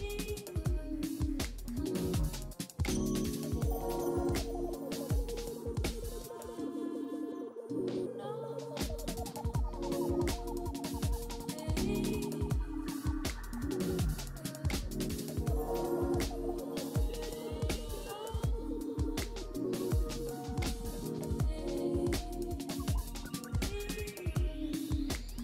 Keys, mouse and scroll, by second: 2.8 double click, 8.2-11.2 scroll down 1, 15.8 right click.